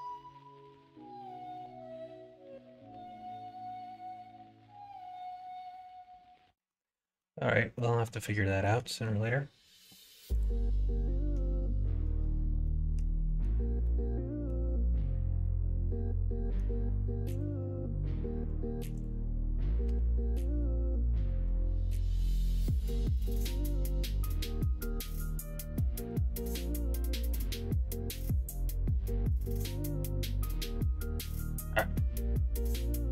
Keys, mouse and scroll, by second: 0.1 ctrl+z, 1.3 click, 2.4 g, 5.3 ctrl+z, 6.5 middle click, 6.9 middle click, 7.5 middle click, 8.0 middle click, 8.4 shift+middle click, 8.8 middle click, 12.6 middle click, 13.2 middle click, 13.7 middle click, 15.3-16.5 middle drag, 17.2 click, 19.8 g, 21.2 click, 21.4 g, 22.2 click, 22.7 g, 24.1 click, 25.2 shift+click, 25.7 shift+click, 26.5 g, 27.6 ctrl+z, 28.4 click, 30.1 g, 30.8 ctrl+z, 31.8 l, 32.9 s.